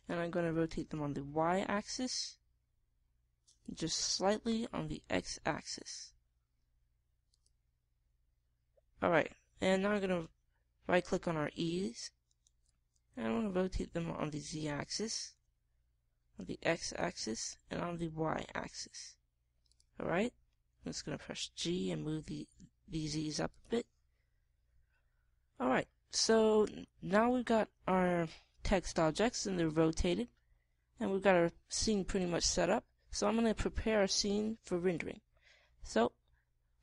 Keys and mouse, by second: 1.0-2.8 drag, 1.8 r, 4.6 click, 5.3 r, 6.5-8.3 middle drag, 10.2 middle click, 11.0-12.9 drag, 13.2-17.6 drag, 14.3 r, 16.2 r, 18.3 r, 21.4 g, 24.5 click.